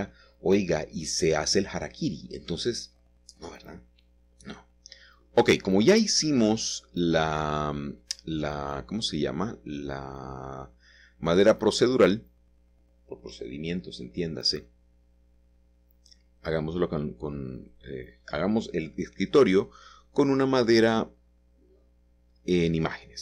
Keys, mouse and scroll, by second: 0.3-1.5 shift+middle drag, 1.3 click, 4.5 click, 5.3 typing, 7.8-8.9 drag, 9.2 Escape, 9.9 a, 11.8 click, 12.7 click, 13.3 click, 15.1 click, 16.8-23.2 drag.